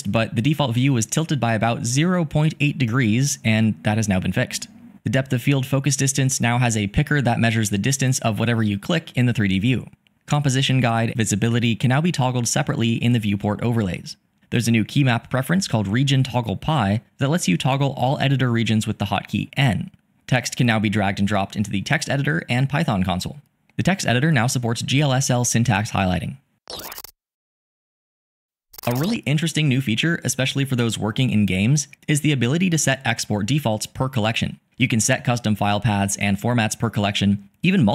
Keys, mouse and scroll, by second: 8.2 click.